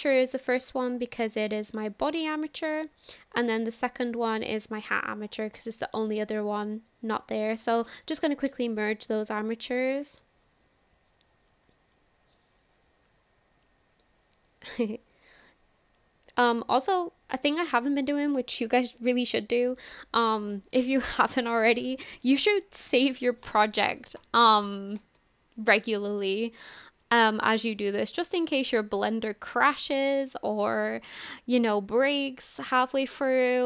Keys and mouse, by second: 4.0-4.9 drag, 7.7-16.4 drag.